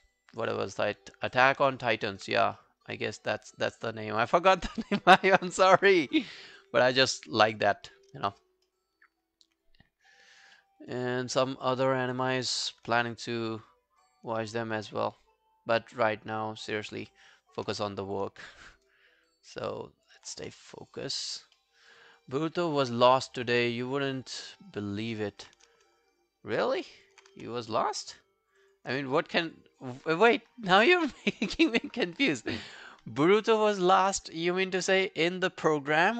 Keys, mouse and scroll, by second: 2.6 alt+middle click, 2.6 click, 2.8 alt+right click, 3.1 alt+click, 8.7 alt+middle click, 9.1 alt+click, 10.6 alt+middle click, 10.8 alt+right click, 11.0 alt+click, 11.4 alt+right click, 11.7 alt+click, 13.1 shift+right click, 18.4 alt+middle click, 18.7 alt+right click, 18.9 alt+click, 20.4 q, 21.2 alt+click, 21.2 alt+click, 21.6 alt+middle click, 21.8 alt+right click, 22.0 alt+click, 22.4 alt+right click, 22.6 alt+click, 24.9 alt+click, 25.9 alt+click, 26.8 alt+click, 27.4 alt+click, 27.4 w, 27.6 right click, 28.7 double click, 29.2 alt+click.